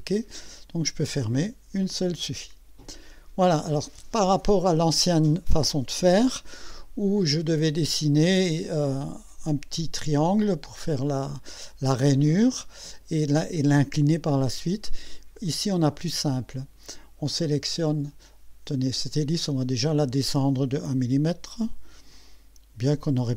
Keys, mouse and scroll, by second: 1.2 click, 1.8-3.4 drag, 9.8-10.5 right drag, 15.5 right click, 16.4 click, 19.1 click, 22.1 click.